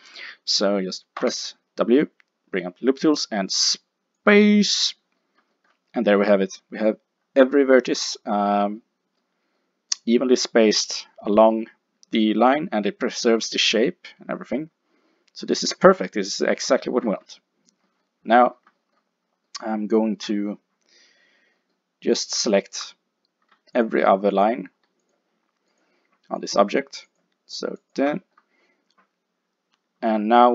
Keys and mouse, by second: 1.2 w, 20.3 KP_5, 22.4-29.5 drag, 29.5 middle click.